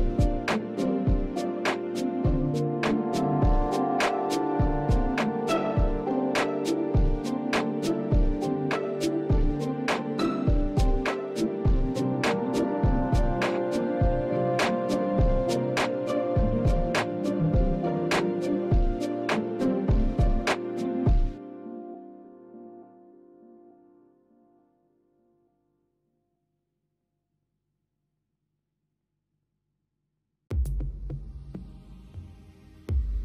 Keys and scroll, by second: 20.0 ctrl+space, 24.6 space, 27.2 space, 30.5 space.